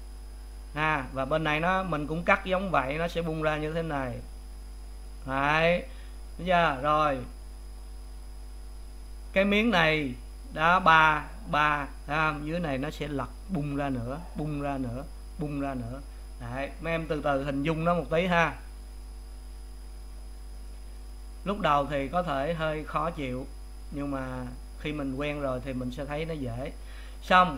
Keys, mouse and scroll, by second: 26.2-27.5 drag.